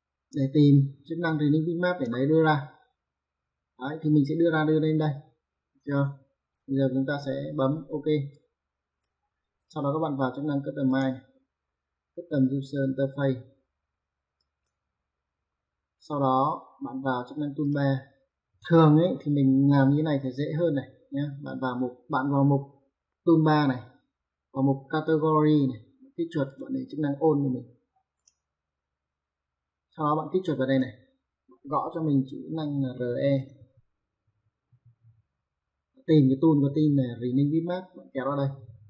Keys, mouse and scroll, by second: 1.0 click, 7.0 `, 7.3 Escape, 8.4 click, 10.9 click, 14.5 click, 17.7 click, 26.2 click, 27.9 click, 30.4 click, 33.1 r, 33.4 e.